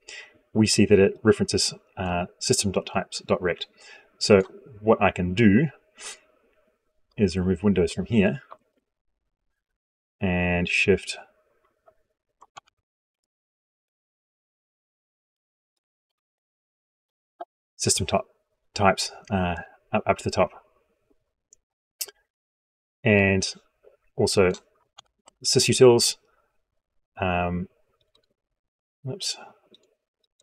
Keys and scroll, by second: 12.4 ctrl+x, 15.9 ctrl+v, 24.7 ctrl+x.